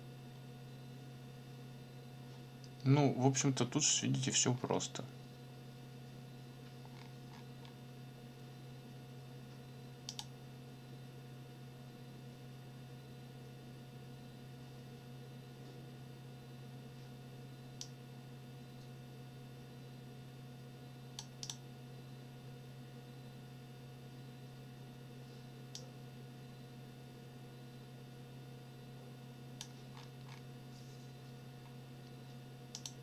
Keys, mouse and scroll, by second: 4.5-4.8 scroll down 2, 6.9-7.8 scroll down 2, 10.1 click, 17.8-21.3 drag, 21.4 click, 25.7-29.8 drag, 29.9-30.5 scroll up 4, 31.6-31.9 scroll up 2, 32.7 click.